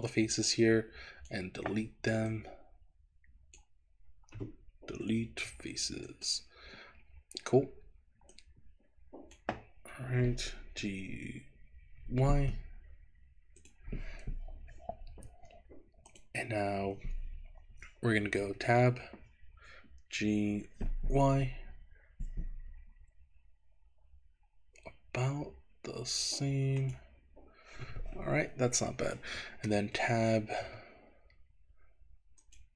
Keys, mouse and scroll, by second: 0.5 click, 2.3-3.6 drag, 5.0 Delete, 8.4-9.5 drag, 10.8 g, 12.5 y, 13.7 click, 15.0 Escape, 16.2 click, 18.5 Tab, 20.3 g, 21.3 y, 26.9 click, 30.0 Tab, 30.7 Tab, 32.4 click.